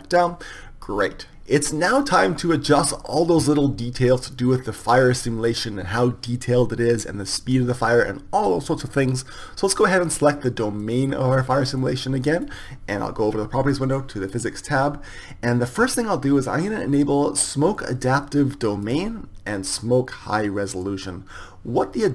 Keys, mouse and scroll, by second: 0.0-1.3 drag, 2.4-10.8 middle drag, 10.8-13.5 right drag, 13.5 middle click, 19.0-22.1 drag.